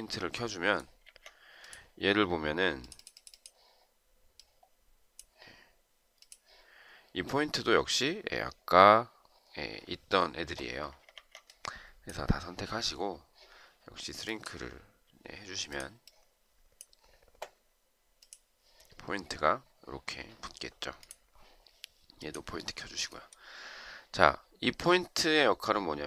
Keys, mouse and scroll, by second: 0.9 Escape, 10.6 Escape, 11.1 Escape.